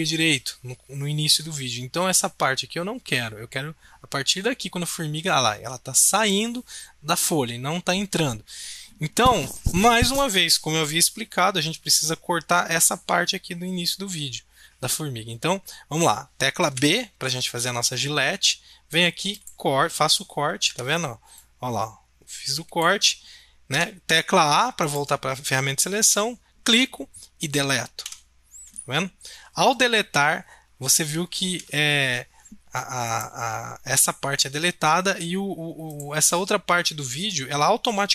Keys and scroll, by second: 16.6 b, 20.7 a, 23.7 a, 28.0 Delete, 31.4 ctrl+z.